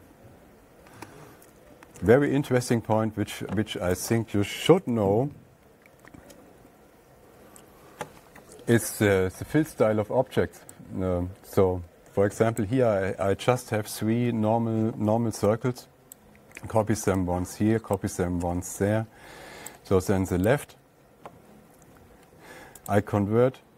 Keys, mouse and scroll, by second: 1.2 Page_Down, 2.4 Page_Up, 2.8 alt+Tab, 4.6 click, 5.2 Page_Down, 5.7 Page_Down, 6.4 Page_Down, 7.1 Page_Down, 7.2 Page_Down, 7.7 Page_Down, 13.1 click, 16.7 ctrl+click, 18.4 click, 20.1 click, 20.9 right click, 23.3 click.